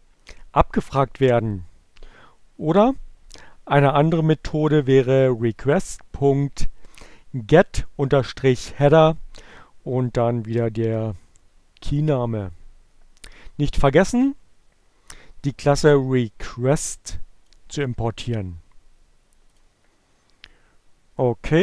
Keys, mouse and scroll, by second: 3.5 click, 4.3-6.2 drag, 16.3 click, 18.9-20.1 drag.